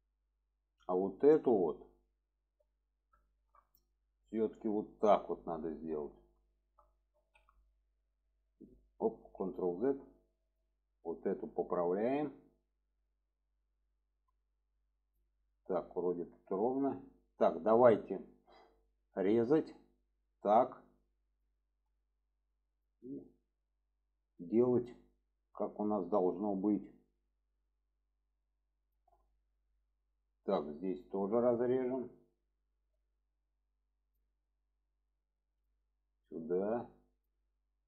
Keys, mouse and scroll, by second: 0.2 middle click, 2.1-2.9 middle drag, 3.3 shift+middle drag, 4.7 click, 6.5 shift+middle click, 7.2 alt+z, 8.2-8.6 drag, 9.1 ctrl+z, 10.2-10.6 drag, 11.1 click, 12.9 click, 14.5-14.8 shift+middle drag, 16.9 shift+middle drag, 19.0 click, 20.3 click, 21.3 click, 22.7 drag, 23.5-24.9 drag, 25.5 shift+middle click, 26.2 click, 27.2-29.0 drag, 29.3 shift+middle drag, 32.2 click, 34.1 click, 35.0 shift+middle click, 35.4 drag, 36.2 click, 37.5 shift+middle drag.